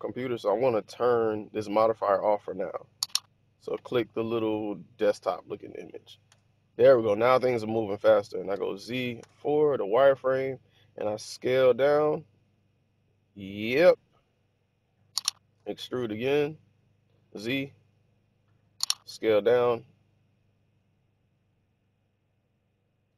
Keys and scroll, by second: 6.1 1, 8.4 z, 9.1 4, 11.2 s, 15.5 e, 17.5 z, 18.9 s.